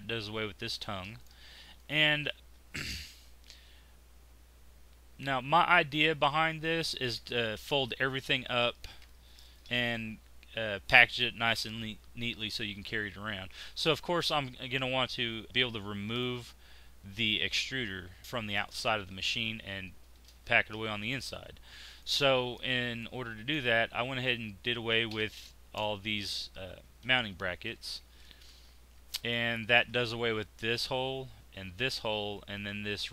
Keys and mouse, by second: 0.8 x, 1.7 click, 18.4-21.9 middle drag, 25.0 x, 28.5 click, 29.3-33.1 middle drag.